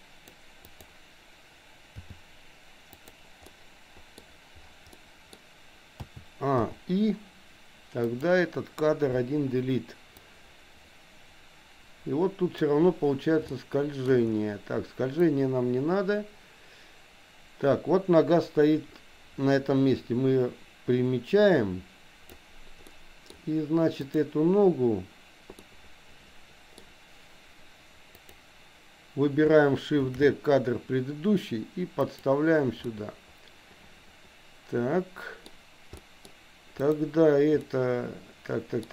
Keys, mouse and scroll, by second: 0.6 click, 2.0 g, 3.5 middle click, 5.0 middle click, 6.0 a, 6.7 i, 8.0 click, 9.4 Delete, 10.2-12.7 drag, 13.5 shift+middle click, 15.4-22.5 drag, 22.9 middle click, 24.0 click, 25.7-26.7 middle drag, 28.2 click, 30.1 shift+d, 32.9-35.5 middle drag, 36.0 middle click, 36.7 click, 37.6-38.9 middle drag.